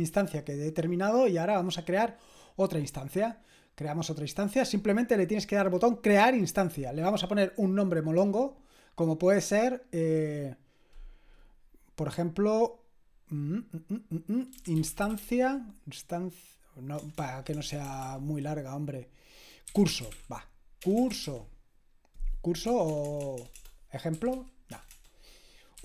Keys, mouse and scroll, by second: 3.2 click, 7.7-10.6 drag, 14.3-15.7 typing, 17.0-18.0 typing, 19.5-25.8 typing.